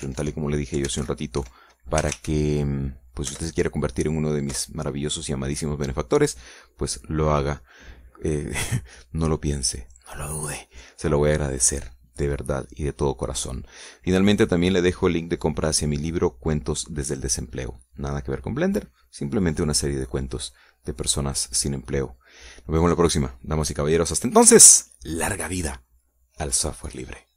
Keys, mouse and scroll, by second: 0.0-3.2 typing, 4.3 Return, 5.5 Return.